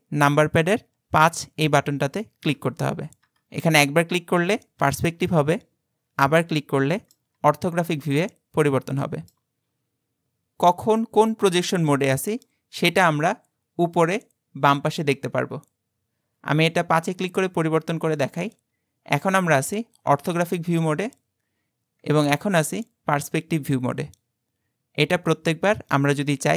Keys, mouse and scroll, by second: 2.6 KP_5, 3.3 KP_5, 4.2 KP_5, 4.8 KP_5, 6.3-7.4 middle drag, 7.4 KP_5, 8.0-10.6 middle drag, 18.5 KP_5, 22.1 KP_5.